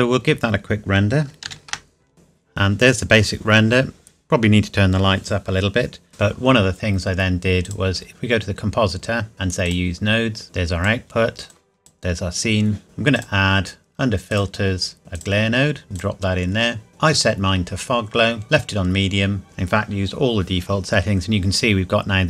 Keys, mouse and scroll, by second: 1.7 ctrl+s, 7.7 click, 8.5-9.3 scroll down 1, 9.3-9.7 scroll up 1, 9.7 click, 13.1 click, 20.7 scroll down 1.